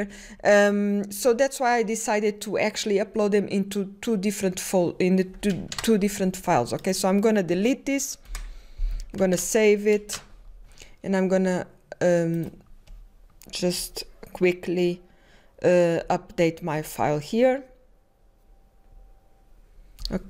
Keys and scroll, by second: 0.5-1.3 typing, 9.9-10.6 typing.